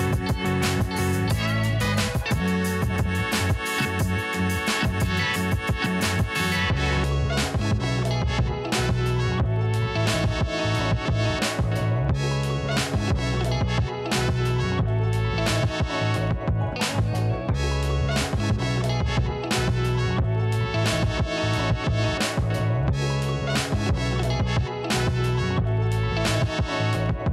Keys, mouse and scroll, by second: 0.7 click, 0.8 click, 3.3 click, 5.0-5.5 scroll down 2, 6.3 alt+scroll up 1, 6.3 click, 7.8-10.1 typing, 9.7-10.1 alt+scroll down 1, 10.1 click, 16.0 alt+scroll down 1, 16.3-19.8 drag, 20.5 scroll down 2, 21.2 click, 21.8 click, 23.1 alt+scroll up 1, 24.1 shift+click, 24.3 ctrl+g, 24.7 click, 24.9-26.5 typing, 27.0 alt+scroll down 1.